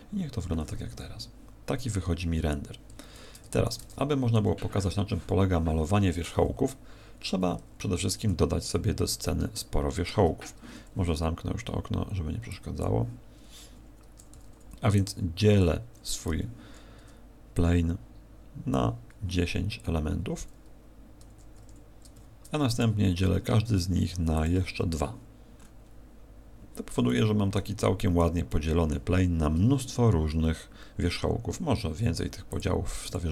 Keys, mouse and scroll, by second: 12.8 click, 13.4-14.0 scroll up 1, 14.4 w, 16.2 t, 17.5 click, 21.2 Tab, 21.6 Tab, 22.1 w, 24.4 click, 25.6-26.1 scroll up 4, 27.0 middle click, 27.8 middle click, 28.4 middle click, 32.5 click, 33.0 click.